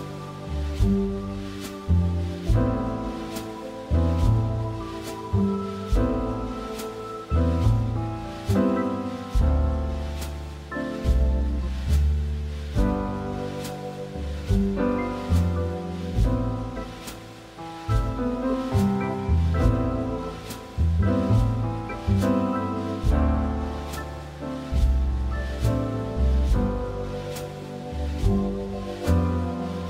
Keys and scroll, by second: 0.3 Escape, 4.7 6, 7.6 6, 21.9 Escape, 24.4 Escape, 26.1 Escape.